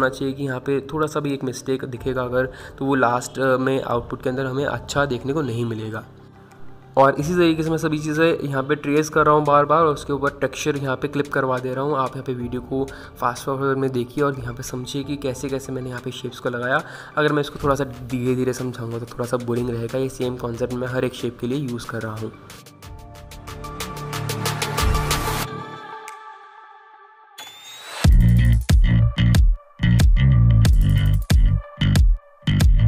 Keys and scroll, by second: 0.7 ctrl+z, 5.9 ctrl+j, 20.3 ctrl+t, 24.4 ctrl+z, 25.1 ctrl+z, 28.2 ctrl+z.